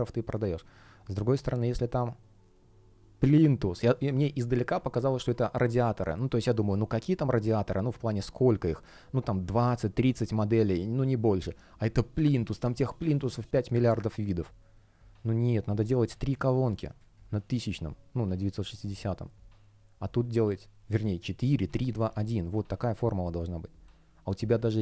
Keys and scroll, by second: 16.9 space.